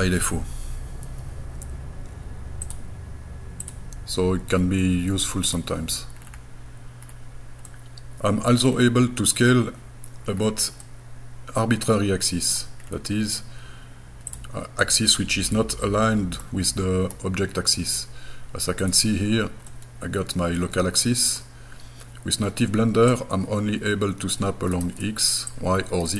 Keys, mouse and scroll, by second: 0.2 Escape, 2.6-5.6 drag, 6.2-6.5 scroll down 2, 7.1 scroll down 2, 7.7 middle click, 8.7 scroll down 2, 9.9 scroll down 3, 10.3-10.7 scroll up 6, 10.9-12.6 middle drag, 12.8 scroll down 2, 13.4 scroll up 2, 14.3 click, 14.8-16.4 middle drag, 18.8 click, 19.7-21.4 middle drag, 23.1-25.0 drag, 25.5 click.